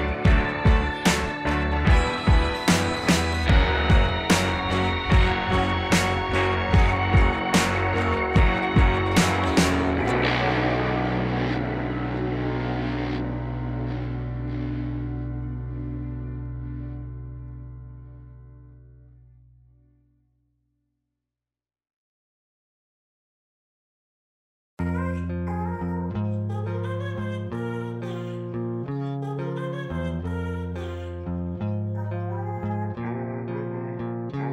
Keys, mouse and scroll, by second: 2.8 click, 5.0-5.9 typing, 5.0 click, 10.4 ctrl+z, 13.8 space, 13.9 click, 14.0 space, 14.3 ], 14.4 ], 18.8 z, 18.9 click, 19.0-19.5 z, 19.3 click, 19.3 z, 21.0-22.8 typing, 21.1 click, 21.5 click, 21.8 click, 25.9 space, 26.9 ], 27.0 ], 33.2-34.5 typing.